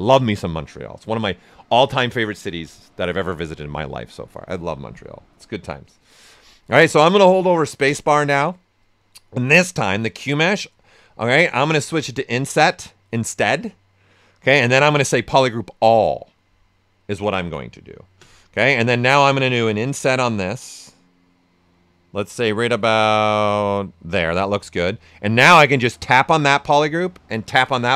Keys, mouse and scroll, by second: 7.8 ctrl+space, 13.8 space, 16.8 space, 19.1 ctrl+right click, 19.7-24.3 ctrl+drag, 24.3 ctrl+right click, 25.9 ctrl+click, 26.5 ctrl+right click, 27.4 ctrl+click.